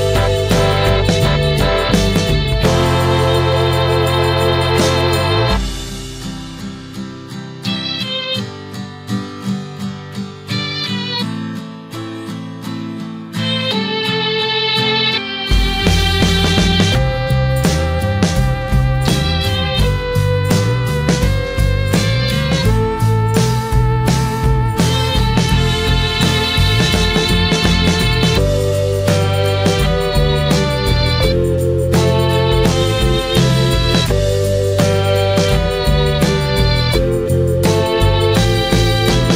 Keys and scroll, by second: 12.8 ctrl+t.